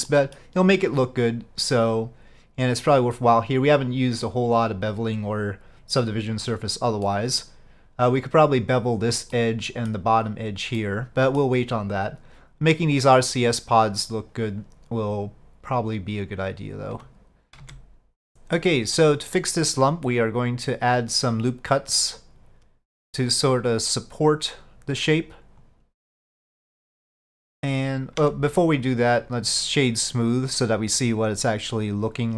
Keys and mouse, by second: 0.2 middle click, 7.1 middle click, 9.4 middle click, 10.9 middle click, 15.8 click, 18.3 middle click, 19.9-23.7 drag, 24.3-25.8 drag, 26.2-27.7 middle drag, 28.3 Tab.